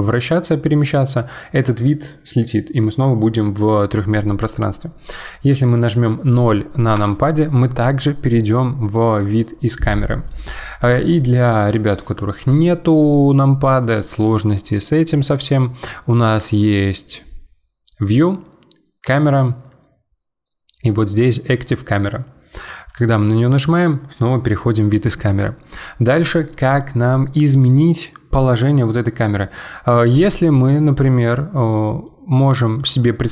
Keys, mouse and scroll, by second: 0.3-0.8 scroll down 4, 0.8-3.9 middle drag, 7.0 KP_0, 11.3-14.3 middle drag, 14.7-17.9 drag, 30.5-30.8 scroll down 3, 30.8-31.5 middle drag, 31.5-31.9 scroll down 4, 31.9 middle click, 32.8 click.